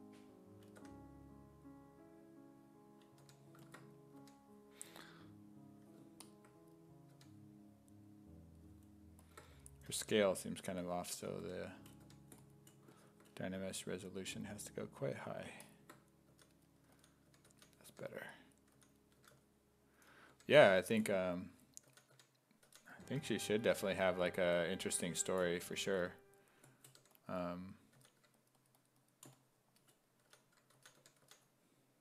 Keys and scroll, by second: 0.8 w, 3.2 1, 4.2 1, 7.2 1, 10.0 1, 11.2 s, 11.4 1, 12.1 1, 16.3-23.0 typing, 24.9 1, 27.0 1, 28.0 s, 30.0-31.8 typing.